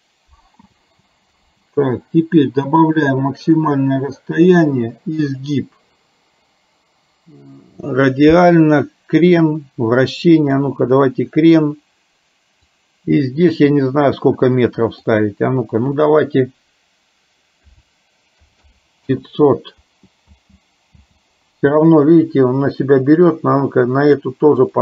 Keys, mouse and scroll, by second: 0.0 click, 0.9 space, 1.5 space, 2.8 click, 12.6-15.2 drag, 15.9-19.1 drag, 18.6 KP_0, 20.4 space, 21.0 space, 22.9 click.